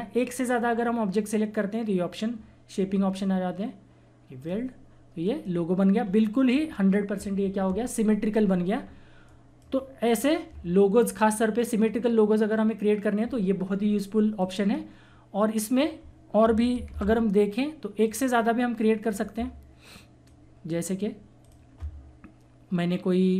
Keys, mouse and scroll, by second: 4.3 click, 6.0-6.5 scroll up 1, 8.3 scroll down 1, 9.2-12.2 drag, 14.4-16.9 drag, 16.9 ctrl+z, 18.0 click.